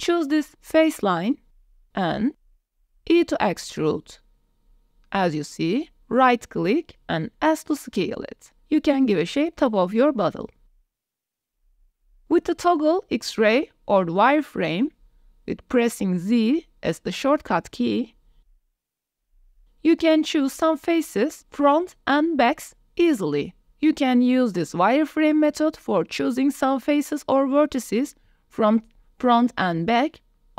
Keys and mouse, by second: 0.1 3, 1.4 alt+click, 1.7 click, 2.4 shift+middle click, 2.6 click, 3.2 e, 5.9 s, 7.8 click, 9.2 click, 9.8 Tab, 10.1-10.6 drag, 10.9 click, 11.0 Tab, 11.0 click, 16.3 click, 17.8 z, 19.2 click, 20.0 KP_1, 22.6-25.3 drag, 26.4 shift+click, 27.7 click, 29.6 click.